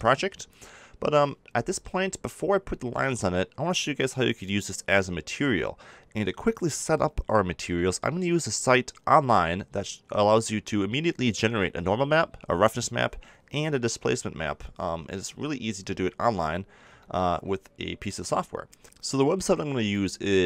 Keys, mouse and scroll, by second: 0.5-4.8 middle drag, 14.9-18.8 middle drag.